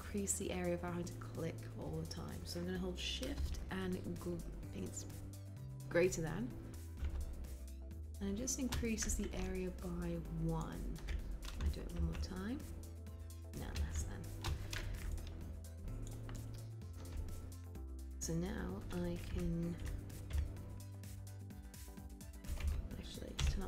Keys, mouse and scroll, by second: 7.1 >, 20.2 r, 23.5 b.